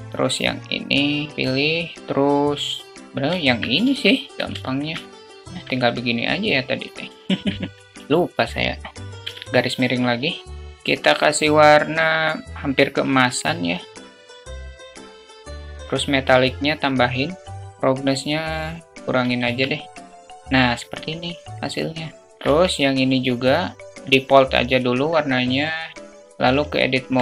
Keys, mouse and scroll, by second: 1.0 shift+click, 3.2 alt+click, 4.3 alt+z, 4.4 shift+click, 5.8 click, 6.9 alt+z, 7.8 middle click, 8.0 `, 9.1 /, 10.6 KP_0, 19.2 Tab.